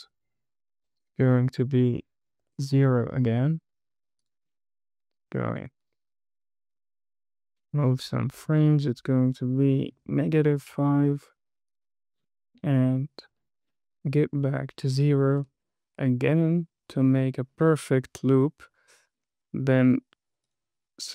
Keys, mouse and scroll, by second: 4.6 click, 5.3 KP_2, 5.4 Right, 5.8 KP_2, 5.8 Right, 6.1 KP_2, 6.2 Right, 8.8-10.5 drag, 12.1 click, 13.1 KP_2, 13.2 Right, 13.3 KP_2, 13.4 Right, 13.7 KP_2, 13.8 Right, 14.8 click, 17.4 click, 19.9 drag, 20.8-21.1 right drag.